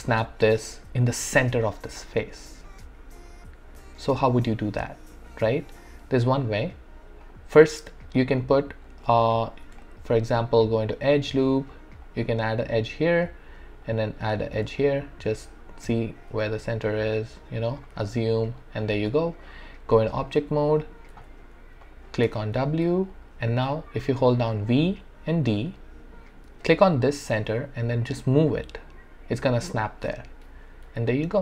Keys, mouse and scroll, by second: 3.8 alt+click, 4.0 alt+middle click, 4.4-6.6 alt+right drag, 6.6 click, 7.2 right click, 7.2 right click, 8.2 click, 9.8-12.0 shift+right drag, 12.0-13.8 drag, 13.8 click, 14.8-16.5 drag, 16.5 ctrl+z, 17.1 click, 18.1-19.9 alt+drag, 19.9 right click, 20.6 click, 21.1 q, 21.8 click, 22.2 w, 23.0-24.7 alt+drag, 24.7-30.1 typing, 31.1 alt+click, 31.1-31.4 alt+drag.